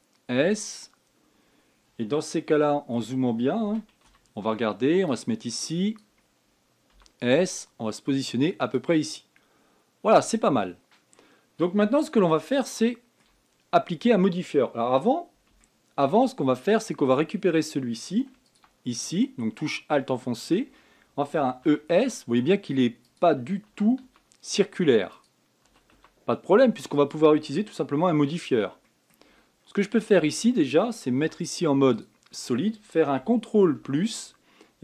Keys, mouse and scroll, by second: 0.4 s, 2.1-3.3 scroll up 2, 3.3-4.4 shift+middle drag, 4.4 a, 4.8 b, 7.7 s, 11.1-11.6 scroll down 6, 13.1 scroll down 1, 13.1-16.1 shift+middle drag, 16.3 shift+middle click, 17.0-17.6 scroll up 8, 19.2 alt+click, 19.8-20.6 scroll down 5, 20.6-22.1 middle drag, 22.1 e, 24.4 e, 28.7 f, 29.2-29.6 scroll down 2, 29.6 middle click, 30.1 scroll up 1, 30.5-31.9 middle drag, 31.9 z, 34.5 ctrl+KP_Add.